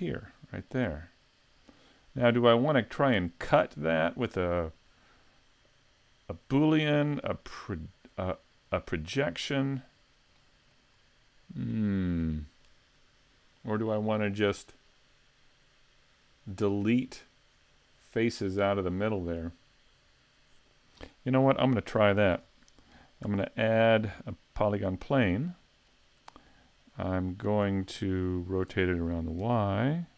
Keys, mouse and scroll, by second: 2.3-5.5 scroll down 2, 7.0 middle click, 9.8 click, 10.4 middle click, 11.0-11.7 scroll up 1, 11.7 shift+middle click, 21.6 middle click, 23.2 shift+a, 25.4 middle click, 26.8 click, 27.9 middle click, 28.7 r.